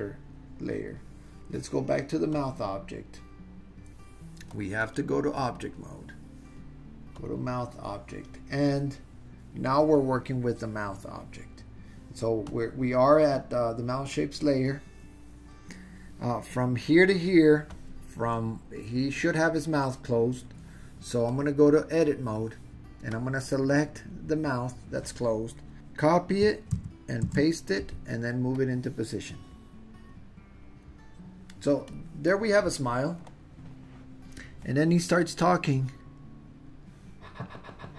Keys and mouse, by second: 4.9-5.7 drag, 7.2 drag, 12.5 click, 21.3-22.1 drag, 23.2-24.2 drag, 25.7 super+z, 26.7 super+c, 27.3 super+v, 28.5-30.9 drag, 31.9 click, 35.3-37.9 drag.